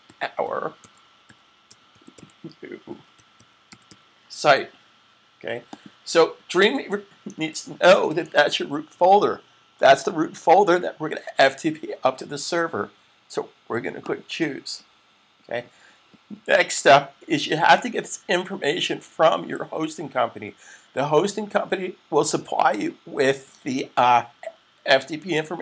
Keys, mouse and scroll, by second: 0.0-4.2 typing, 5.5 click, 13.7 click.